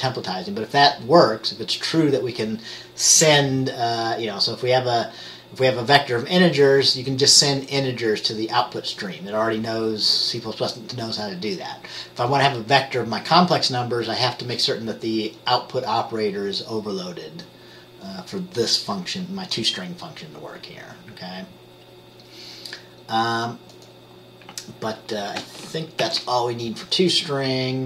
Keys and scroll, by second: 26.1 ctrl+s.